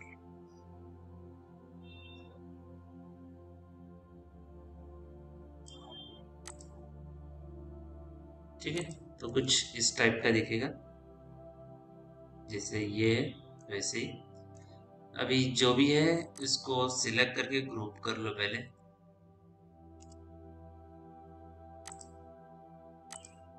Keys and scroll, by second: 9.9 p, 19.2 q, 19.9 F3.